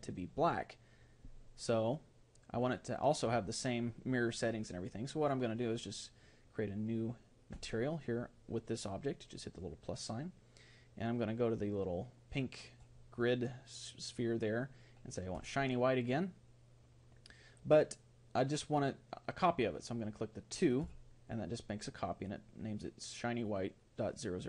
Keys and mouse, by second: 7.6-15.4 drag, 20.8-24.4 drag.